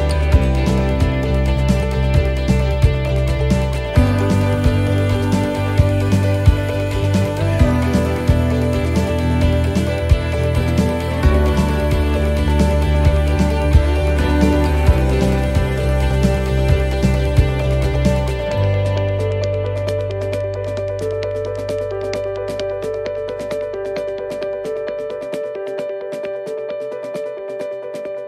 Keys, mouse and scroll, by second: 0.1 right click, 0.5 shift+middle click, 1.7 shift+right click, 5.6 shift+right click, 5.8 middle click, 7.2 s, 11.1 middle click, 11.5 scroll down 2, 12.1 middle click, 12.8-13.4 scroll up 2, 13.4 shift+middle click, 14.6 right click, 15.5 click, 18.8 middle click, 19.6 shift+middle click, 20.8 middle click, 21.2 scroll down 1, 21.9-22.4 scroll down 1, 22.4 l, 22.9 middle click, 23.8 s.